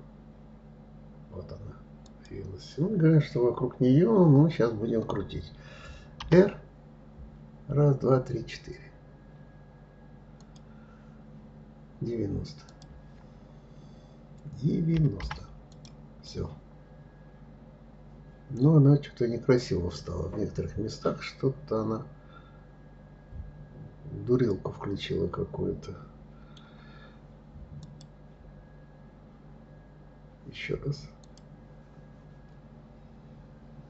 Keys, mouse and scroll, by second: 12.3-15.3 drag, 15.9-18.9 middle drag, 27.5 click, 30.9 click.